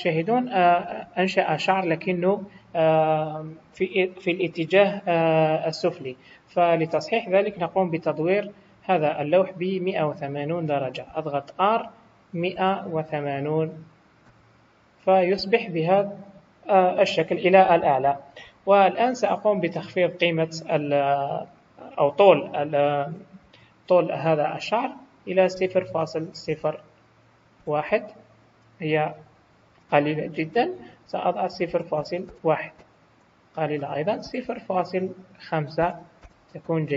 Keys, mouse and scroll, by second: 0.0 middle click, 0.8 scroll down 2, 1.3 middle click, 3.6 KP_1, 8.5-8.9 scroll up 4, 9.1 scroll down 1, 9.8 scroll down 1, 11.7 r, 22.9 click, 29.2 scroll up 4, 30.8 click, 33.6 click.